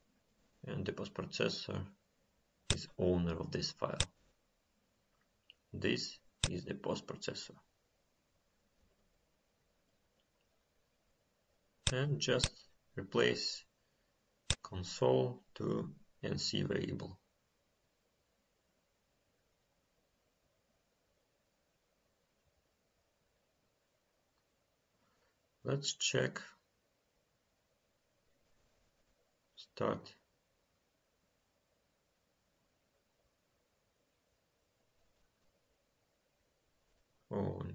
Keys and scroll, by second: 23.3 ctrl+s.